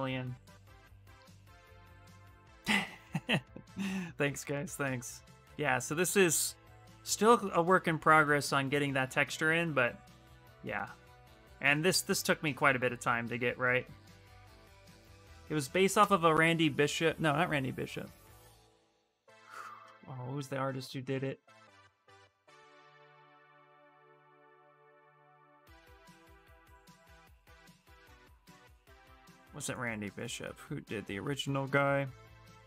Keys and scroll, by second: 15.7 shift+r.